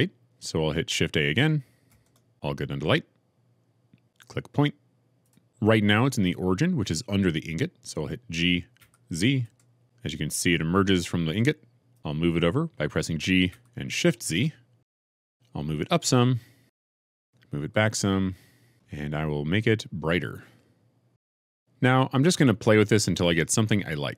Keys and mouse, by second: 1.8 shift+a, 8.9 g, 9.4 z, 13.6 g, 14.3 shift+z, 15.2 click, 15.7 g, 16.0 z, 17.7 shift+g, 17.8 shift+z, 20.2-21.4 drag.